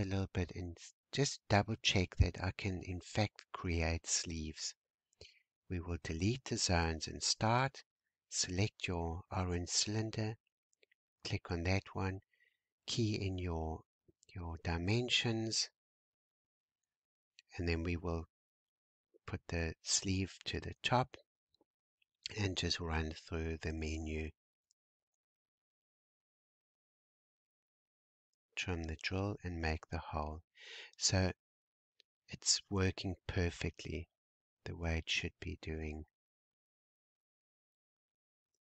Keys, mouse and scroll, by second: 0.7 scroll down 1, 1.0-2.1 scroll up 2, 2.1-4.0 scroll down 15, 4.0 click, 4.4-6.1 scroll down 11, 6.1-6.9 scroll down 1, 6.9-8.1 drag, 10.4-16.8 drag, 16.8 KP_2, 18.4-19.2 scroll down 2, 21.9-29.8 drag, 29.8 middle click, 30.4-30.8 scroll down 1, 30.8-31.4 scroll up 5, 31.4-33.4 scroll down 1, 33.4-34.5 scroll down 2, 34.5-38.6 shift+middle drag.